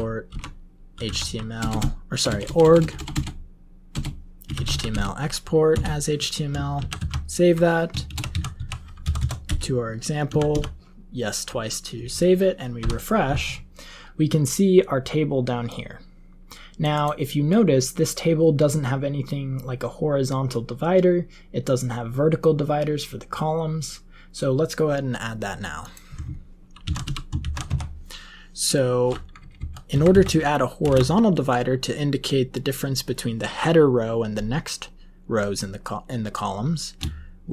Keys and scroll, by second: 0.0-3.1 typing, 4.1-5.3 typing, 5.6 Return, 6.7 ctrl+x, 6.9 ctrl+s, 7.8-8.5 typing, 8.9 Down, 9.1 Down, 9.4 Return, 10.2 y, 10.4 y, 12.7 F5, 26.8 ctrl+x, 27.0 o, 27.4 ctrl+x, 27.6 1, 29.3 Up, 29.5 Up, 29.9 Left, 30.1 Left, 30.8 Return, 30.8 Up.